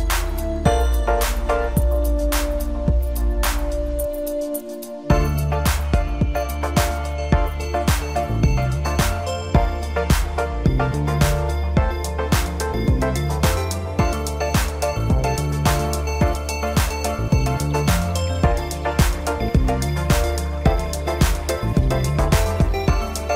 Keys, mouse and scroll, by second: 0.3-2.0 drag, 2.0 scroll down 3, 2.3-3.3 middle drag, 3.3-4.4 scroll up 2, 4.4 click, 5.1 Tab, 6.0 KP_Divide, 7.6 click, 8.0 scroll down 3, 8.3-9.2 middle drag, 9.2-10.8 scroll up 1, 10.8 click, 12.9-16.0 drag, 16.3-19.3 middle drag, 20.6-21.6 scroll down 1, 21.6 KP_1.